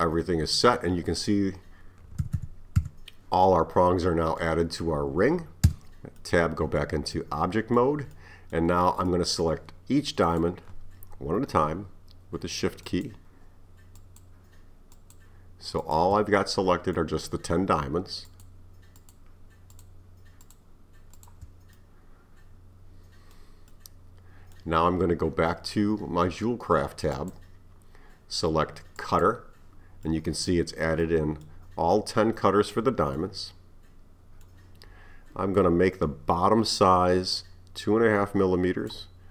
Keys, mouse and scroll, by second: 2.2 a, 2.4 a, 2.8 a, 3.5-5.7 middle drag, 5.7 Tab, 6.2-10.3 middle drag, 10.3 click, 12.9 shift+click, 14.0 shift+click, 14.9 shift+click, 15.9 shift+click, 16.4-17.3 middle drag, 17.3-18.3 scroll down 2, 18.3 shift+click, 19.0 shift+click, 19.8 shift+click, 20.5 shift+click, 21.2 shift+click, 21.8-26.7 middle drag, 27.2 click, 29.0-30.1 drag, 30.1-36.2 middle drag, 37.4-39.3 drag.